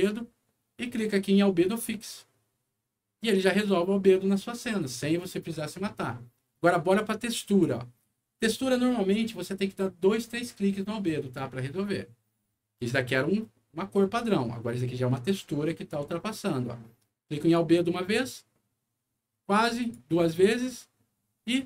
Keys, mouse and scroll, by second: 1.7 click, 7.4 click, 17.3 click, 19.7 click.